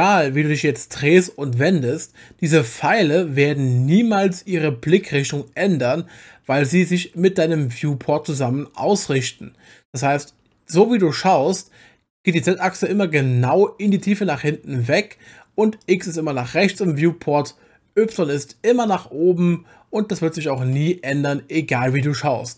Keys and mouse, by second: 0.7-11.5 middle drag, 15.8 click, 16.0-18.1 drag, 18.9-20.6 drag, 21.1-21.8 middle drag.